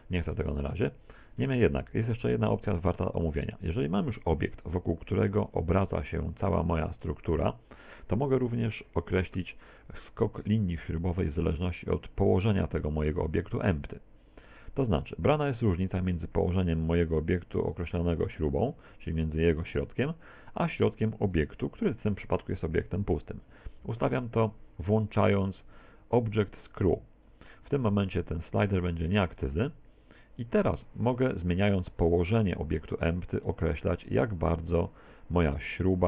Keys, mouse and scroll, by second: 0.2 ctrl+z, 0.5-0.9 scroll down 3, 0.9 ctrl+z, 1.6 shift+middle click, 2.3 middle click, 5.5 right click, 8.6 right click, 9.8 middle click, 12.5 right click, 15.8 right click, 17.7 right click, 21.4 right click, 23.3 right click, 29.4 click, 32.1 right click, 33.1 click.